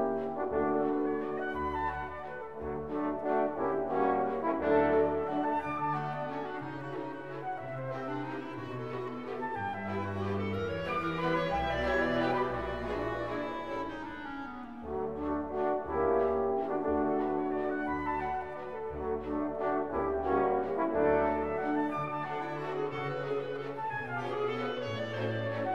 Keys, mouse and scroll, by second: 0.0 click, 3.0 scroll up 1, 3.1-8.5 middle drag, 8.5-8.9 scroll down 3, 8.9 shift+middle click, 9.3 shift+a, 10.6 ctrl+middle click, 11.1-11.9 scroll up 3, 13.1 Tab, 21.6 Tab, 22.4 z, 23.9-25.6 middle drag, 25.6 z.